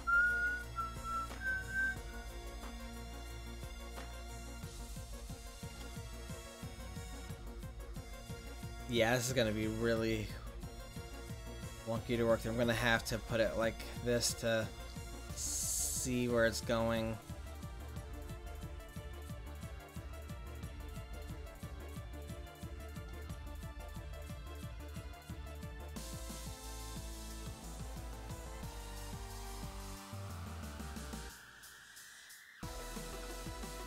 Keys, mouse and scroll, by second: 6.2-7.8 drag, 12.1-15.3 drag, 22.5-25.6 drag, 27.1 click, 29.0 middle click, 30.9-33.8 drag.